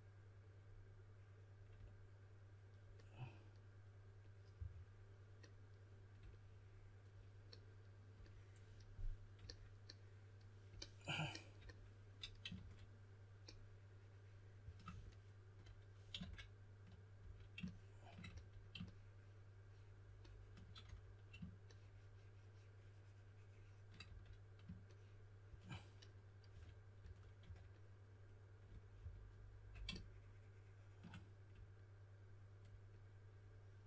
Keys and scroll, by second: 12.5 shift+d, 16.2 shift+d, 17.2 d, 18.3 s, 20.8 d, 24.0 d, 26.3-27.9 typing.